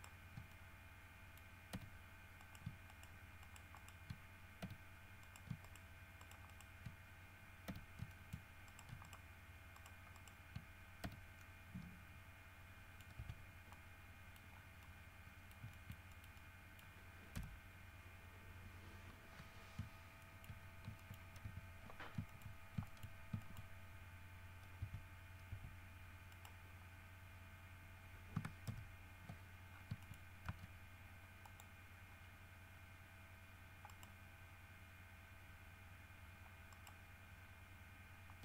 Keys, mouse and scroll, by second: 0.7 shift+click, 0.9 shift+middle click, 1.9 f, 2.6 shift+middle click, 3.1 shift+middle click, 3.6-4.8 shift+middle drag, 4.8 f, 5.4 shift+middle click, 5.8 shift+middle click, 6.4 shift+middle click, 7.9 f, 8.3 shift+middle click, 11.2 shift+f, 12.4 middle click, 13.4 Tab, 13.7 scroll down 2, 13.9 scroll up 2, 13.9 middle click, 14.7 scroll down 1, 15.2 scroll up 2, 15.9-17.2 shift+middle drag, 17.6 KP_3, 18.8 scroll down 2, 19.2 scroll up 2, 20.4 shift+middle click, 20.8 shift+scroll up 2, 21.2 shift+middle click, 21.6 shift+Tab, 22.5 shift+middle click, 23.1 shift+middle click, 23.6 shift+middle click, 24.3 scroll up 2, 25.0 Tab, 25.7 Tab, 26.5 right click, 28.9 ctrl+KP_1, 29.9-30.2 ctrl+scroll down 4, 30.2 shift+middle click, 30.5 shift+scroll up 2, 30.7 shift+z, 31.7 click, 32.3 scroll up 2, 33.4 scroll up 2, 34.1 right click, 36.9 right click.